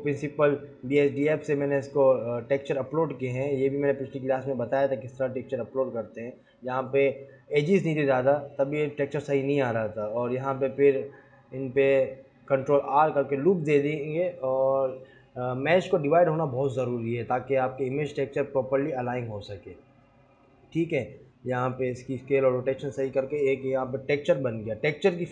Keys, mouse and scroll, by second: 7.5 click, 7.8 Tab, 8.0 Tab, 8.8 click, 9.0 click, 9.4 ctrl+r, 10.9 ctrl+r, 12.2 ctrl+r.